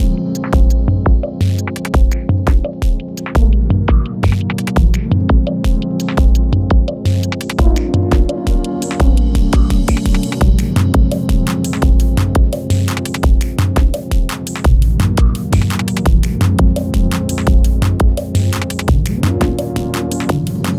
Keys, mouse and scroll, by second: 1.3 click, 2.2 u, 2.9-5.9 drag, 6.5 [, 7.0 space, 11.4 [, 12.0 space, 14.0 Page_Down, 15.0 click, 15.7 [, 16.3 space, 18.1 click, 18.5 [, 18.9 space.